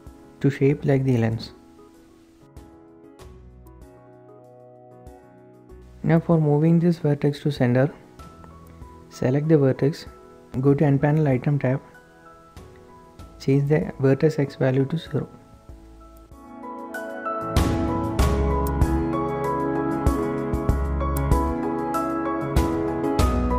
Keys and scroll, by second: 0.1 typing, 1.7-3.2 typing, 5.1 typing, 7.5 typing, 8.9 n, 13.0 KP_0, 13.6 Return, 15.8 Tab, 18.2 KP_7, 22.2 typing, 22.9 Tab.